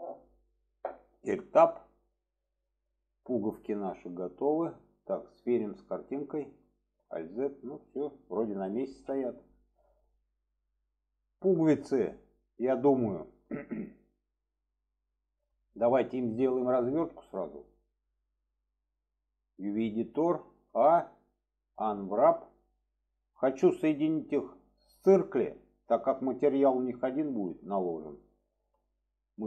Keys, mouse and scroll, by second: 1.3 Tab, 2.0-2.7 middle drag, 6.0 click, 7.0 alt+z, 8.9 alt+z, 10.1-10.4 middle drag, 11.2-11.5 shift+middle drag, 13.2-13.5 shift+middle drag, 15.6-15.9 shift+middle drag.